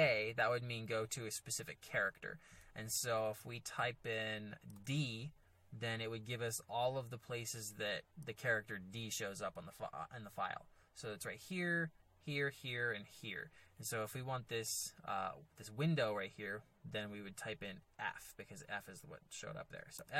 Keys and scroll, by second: 0.0 j, 4.7 d, 19.9 f.